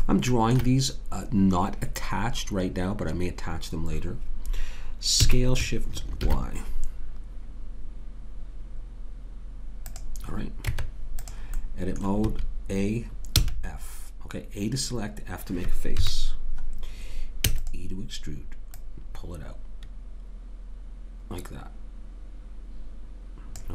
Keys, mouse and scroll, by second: 5.2 s, 10.7 Tab, 12.2 a, 13.4 f, 15.9 KP_3, 17.4 e, 18.7 click.